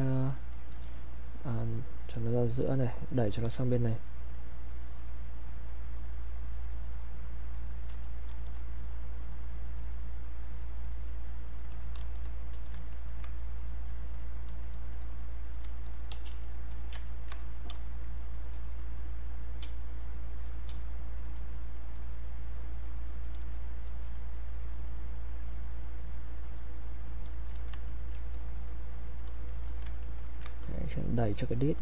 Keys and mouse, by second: 1.5 alt+click, 4.0 click, 4.9 click, 5.9-9.3 drag, 9.3-12.5 drag, 12.5 alt+click, 12.9 ctrl+right click, 13.7 click, 15.0 click, 16.1 q, 16.7 alt+click, 17.1 ctrl+right click, 17.3 ctrl+click, 17.7 ctrl+space, 18.6 ctrl+click, 19.7 ctrl+space, 20.0 ctrl+click, 20.2 ctrl+space, 21.0 ctrl+click, 21.2 ctrl+space, 21.4 ctrl+click, 23.4 ctrl+space, 23.8 ctrl+click, 25.5-27.9 ctrl+drag, 27.9 ctrl+right click, 28.3-29.7 drag, 29.7 alt+click, 30.0 ctrl+right click, 30.6 click.